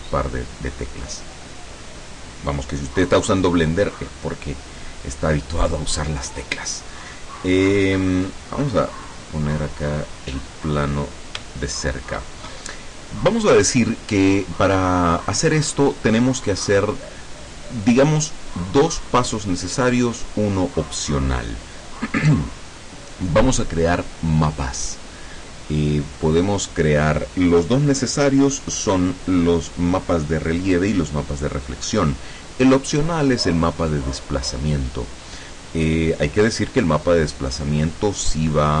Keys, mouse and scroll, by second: 8.5-9.5 middle drag, 9.9 middle click, 10.7 scroll up 2, 11.2 scroll down 2, 11.5 shift+click, 12.6 shift+scroll up 2, 13.3 scroll down 1.